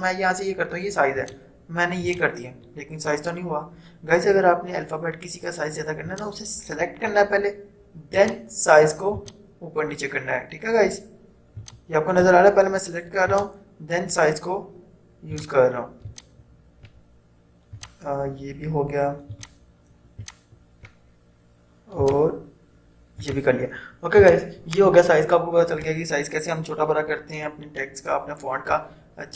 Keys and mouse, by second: 1.2 click, 6.2-8.3 drag, 11.8-22.0 drag.